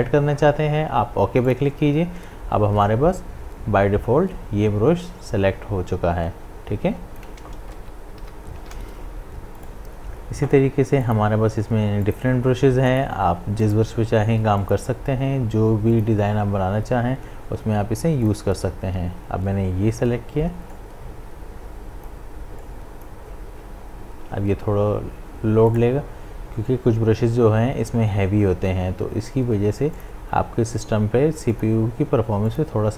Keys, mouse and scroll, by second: 1.5-7.8 drag, 7.8 ctrl+z, 9.6 right click, 11.0 click, 18.2 click, 20.7-25.5 drag, 25.7 right click.